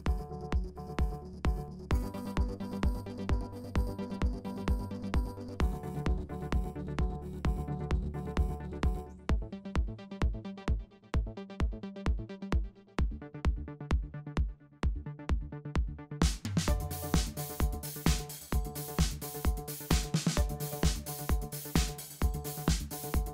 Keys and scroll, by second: 2.0 super+z, 3.9-5.7 typing, 8.0 shift+super+a, 9.2 shift+super+a, 9.5 alt+super+b, 9.7 super+w, 11.4 super+2, 12.1 super+2, 14.2 shift+super+a, 15.8 shift+super+a, 16.2 alt+super+b, 16.4 super+2, 17.9 super+-, 19.5 shift+super+a, 21.2 shift+super+a, 21.8 alt+super+b, 22.0 super+2, 23.1 shift+super+a.